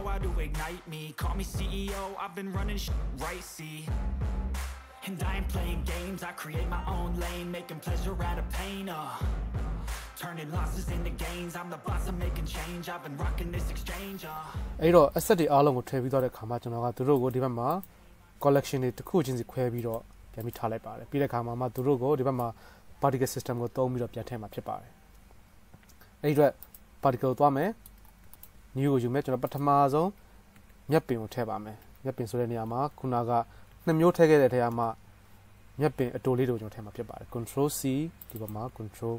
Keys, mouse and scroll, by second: 0.6 shift+middle click, 1.2 middle drag, 3.0-3.7 shift+middle drag, 5.9 click, 5.9 middle click, 5.9-8.0 right drag, 6.9 click, 6.9 middle click, 7.6 click, 7.6-10.7 middle drag, 11.2-11.7 shift+middle drag, 11.7-15.5 drag, 11.7 KP_0, 17.5 click, 18.1-18.6 drag, 18.8 click, 20.1-20.6 drag, 20.7-21.9 drag, 27.0-28.6 drag, 30.8 s, 32.1 BackSpace, 32.2 BackSpace, 32.5 BackSpace, 34.6 s, 37.6 ctrl+c.